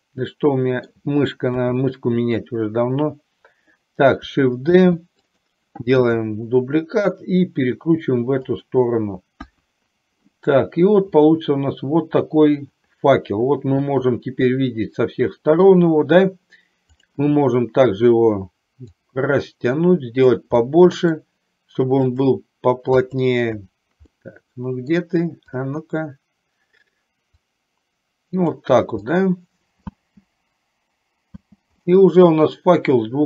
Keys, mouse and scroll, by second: 1.7 KP_7, 5.0 shift+d, 6.0 r, 9.6 KP_1, 11.2-15.7 middle drag, 17.1 click, 19.4-20.6 drag, 20.7 middle click, 22.2 click, 23.1 click, 24.2 middle click, 25.6 click, 27.6-28.7 drag, 29.1-30.1 middle drag, 30.0 space, 31.6 space, 32.0-33.2 middle drag.